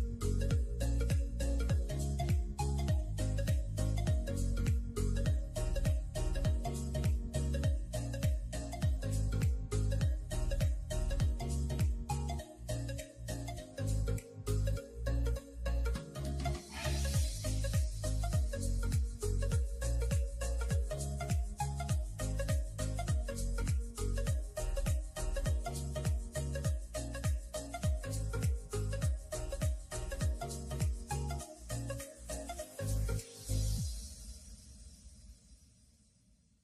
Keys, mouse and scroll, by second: 0.5 click, 0.7 scroll down 4, 1.0-2.6 middle drag, 3.4 click, 3.8-4.2 middle drag, 4.2 click, 4.6-5.6 middle drag, 5.6 scroll up 2, 5.9-6.5 middle drag, 6.5 click, 6.7 Tab, 7.0 shift+middle click, 7.2 scroll up 6, 7.5 scroll down 1, 8.2 ctrl+r, 9.7 scroll down 3, 10.0-10.8 middle drag, 10.8 click, 11.0 scroll down 2, 11.2-12.4 middle drag, 12.4 scroll down 2, 12.6 middle click, 12.8 Tab, 13.0 click, 13.4 space, 13.7-15.6 middle drag, 15.6 click, 17.9-18.7 drag, 19.6 click, 20.0 shift+click, 20.6 ctrl+j, 21.3 click, 21.5 middle click, 21.8 scroll up 1, 21.9-22.6 middle drag, 22.6 Tab, 28.7 middle click, 29.4 click, 32.5-36.6 drag.